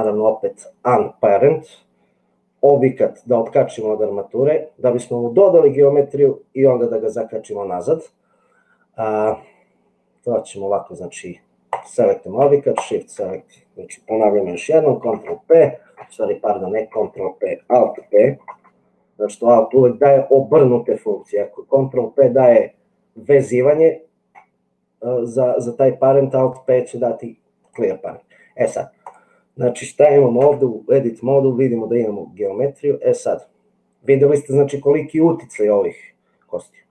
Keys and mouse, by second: 11.6 click, 15.0 ctrl+p, 18.5 alt+p, 30.6 Tab.